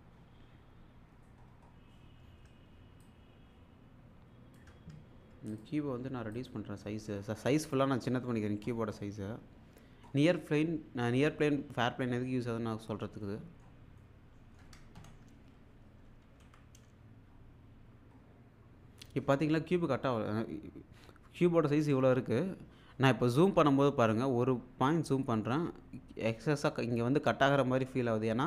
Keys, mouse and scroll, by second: 1.4 scroll down 1, 3.0-4.6 ctrl+shift+click, 5.8 scroll down 1, 6.3 click, 6.7 scroll down 1, 9.2 scroll down 1, 12.4-13.1 scroll up 1, 13.2-13.9 shift+middle click, 16.4 f, 16.9-17.3 scroll up 1, 19.9-20.5 scroll down 1, 24.7-25.4 scroll up 1.